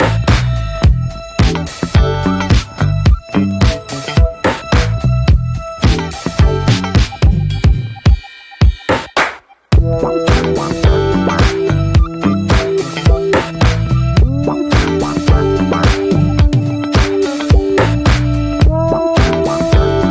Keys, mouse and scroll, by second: 1.7-3.0 drag, 3.0 ctrl+z, 4.5-6.4 drag, 6.4 scroll down 3, 6.6-8.1 middle drag, 8.3 alt+middle click, 9.2 alt+scroll up 1, 9.3 alt+middle click, 10.2 shift+middle click, 10.3-11.3 scroll up 2, 10.6 shift+middle click, 12.7 click, 13.5 click, 13.6-14.5 scroll up 1, 14.5 f, 16.2-18.1 drag, 18.1-18.9 scroll down 3, 18.3 middle click, 18.9 middle click, 19.1-20.1 scroll up 1.